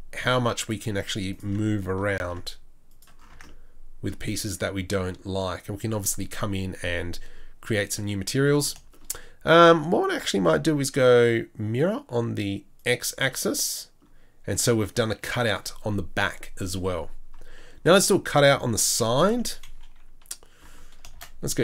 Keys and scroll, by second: 2.2 ctrl+b, 3.3 Tab, 19.0 KP_3, 19.6 KP_1, 21.1 shift+a.